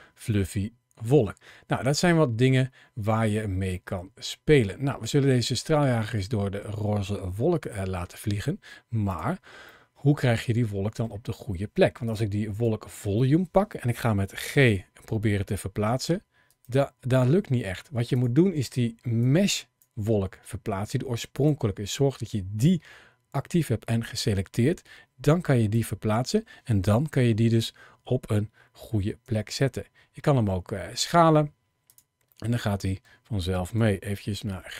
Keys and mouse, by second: 3.7-5.4 middle drag, 7.5 middle drag, 8.9 click, 9.5-10.8 middle drag, 14.2 g, 21.2 click, 23.9 g, 26.8 KP_7, 29.2 s, 32.2-32.8 middle drag, 33.5 g, 34.1 z, 34.2 z.